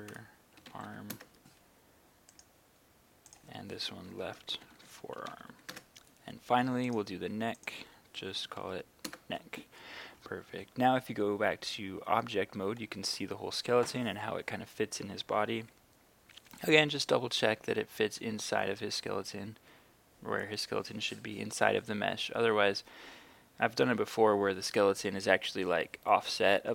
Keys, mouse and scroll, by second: 0.0-0.9 typing, 1.2 Return, 2.3 right click, 3.4 click, 4.0-5.5 typing, 5.8 Return, 6.9 right click, 7.6 click, 8.4-8.8 typing, 9.1 Return, 12.2 Tab, 15.6 KP_3, 17.6 KP_1, 18.7 KP_3, 19.7 KP_1, 24.4 KP_3.